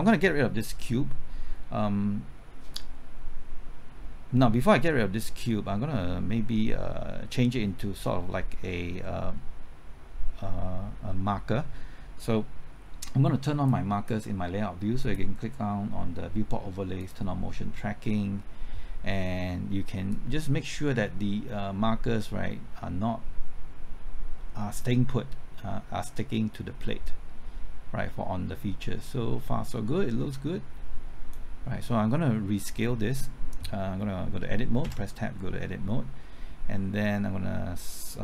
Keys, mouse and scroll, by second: 9.4-9.7 scroll up 1, 13.7-14.9 drag, 34.8 q.